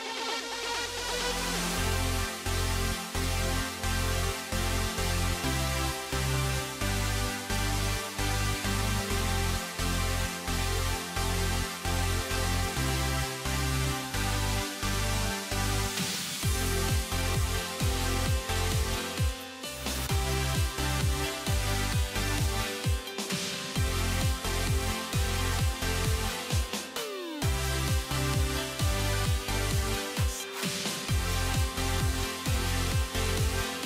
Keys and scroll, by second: 10.0 alt+c.